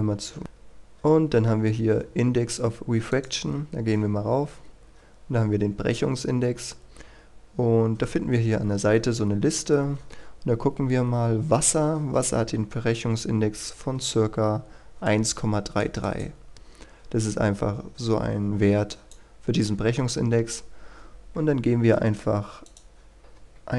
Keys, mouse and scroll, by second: 6.1-8.0 scroll down 1, 8.0-15.0 scroll up 1, 15.0 click, 21.5-22.6 scroll down 1, 22.6 click, 23.6 KP_1.